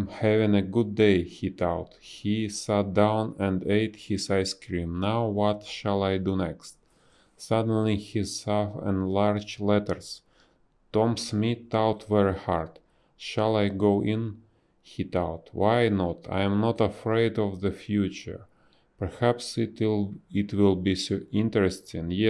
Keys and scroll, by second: 0.5 space, 3.0 space, 5.0 b, 7.8 space, 8.6 space, 9.7 space, 12.3 ctrl+z, 12.3 space, 14.8 space, 15.5 space, 17.1 space, 18.2 space.